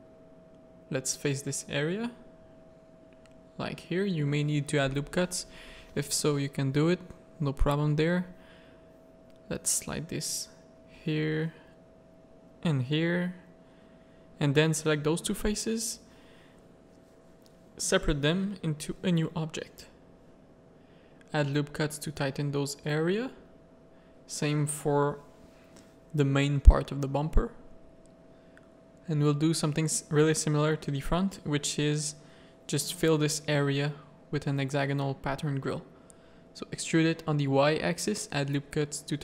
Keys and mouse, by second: 0.0-1.0 typing, 1.4 middle click, 1.7 Tab, 2.1 z, 2.4 z, 3.1 alt+a, 4.5 middle click, 5.1 Tab, 5.4 middle click, 5.7 z, 6.3 click, 7.1 click, 7.5 z, 8.0 g, 9.5 z, 9.7 a, 10.4 z, 10.8 g, 12.0 z, 12.3 a, 12.4 middle click, 12.8 3, 13.9 shift+click, 14.4 z, 14.9 z, 15.5 middle click, 16.0 z, 16.3 middle click, 17.9 Tab, 18.3 alt+a, 18.6 click, 19.6 Tab, 20.1 ctrl+r, 21.5 ctrl+r, 22.4 Tab, 23.0 Tab, 23.3 ctrl+r, 26.7 ctrl+r, 28.7 click, 29.2-31.8 typing, 33.2 Tab, 34.1 middle click, 34.7 Tab, 34.9 a, 35.4 middle click, 35.7 e, 37.1 middle click, 37.6 ctrl+r, 39.0 ctrl+r.